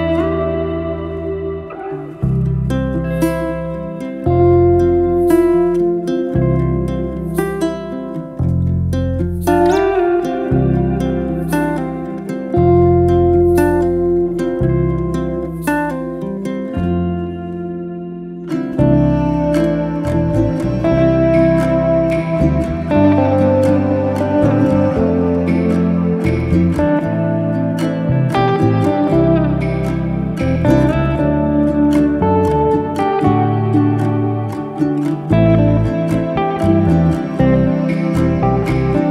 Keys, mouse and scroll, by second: 0.3 click, 2.0 shift+d, 2.8 p, 3.5-5.0 middle drag, 6.2 Delete, 7.1 Tab, 7.4 click, 8.0 Delete, 8.3 Tab, 8.7 Tab, 9.2 click, 9.4 Tab, 9.7 click, 10.4 shift+s, 11.2 Tab, 11.5-12.7 middle drag, 12.7 click, 13.1 scroll up 2, 13.4 shift+middle click, 13.8-15.4 scroll down 1, 15.6 shift+a, 27.8 e.